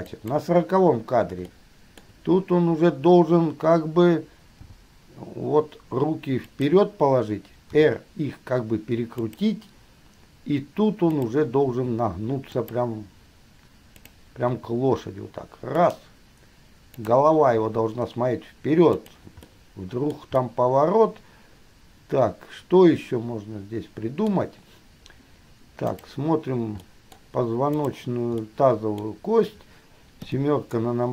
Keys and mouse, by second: 0.3 click, 1.8-2.2 shift+middle drag, 4.8 g, 7.8 r, 11.3 click, 11.9 r, 14.2 click, 14.7 r, 17.2 click, 17.8 r, 20.3 middle drag, 24.8-26.1 middle drag, 26.3-26.9 middle drag, 27.9-28.6 middle drag, 29.7 middle click, 30.4 KP_7.